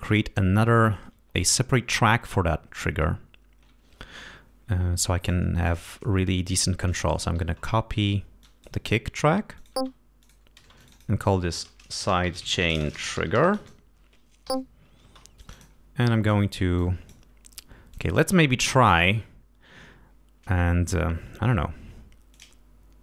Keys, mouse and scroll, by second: 0.1 scroll up 2, 1.0 ctrl+Up, 2.0 ctrl+Up, 4.2 scroll up 2, 5.2 click, 6.5 g, 6.9 click, 7.5 ctrl+click, 8.4 ctrl+click, 8.8 ctrl+scroll up 2, 9.5 ctrl+click, 9.7-15.0 typing, 10.2 click, 10.7 click, 15.4 click, 16.7 click, 17.9 click, 22.3 click.